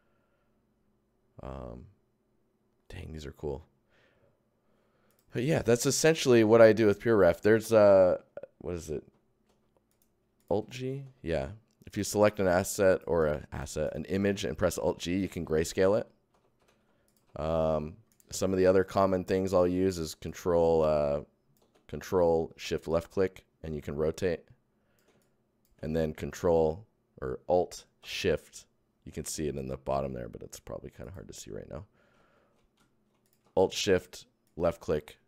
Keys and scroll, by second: 9.0 alt+Tab, 9.4 alt+g, 10.4 alt+Tab, 10.5 alt+g, 12.1 Tab, 12.2 alt+g, 14.2 alt+g, 15.3 alt+Tab, 15.4 alt+g, 17.2 alt+g, 18.0 g, 19.9 ctrl+Tab, 25.1 alt+shift+Tab, 31.0 shift+Tab, 32.1 alt+shift+Tab, 33.2 shift+Tab, 33.7 alt+shift+Tab.